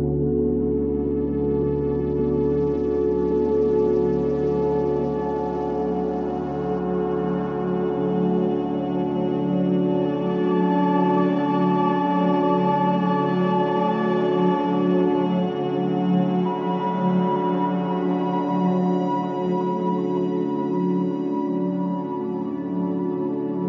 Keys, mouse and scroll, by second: 0.9 click, 1.3 click, 1.9-3.1 drag, 3.1-3.4 scroll up 3, 3.4-4.7 middle drag, 4.7 click, 6.4 click, 7.4 middle click, 8.4 click, 9.1-10.4 middle drag, 10.4-12.4 drag, 13.2-14.4 drag, 14.4 ctrl+b, 19.2 drag, 19.5-21.3 middle drag, 21.3 click, 21.7 click, 22.5 click.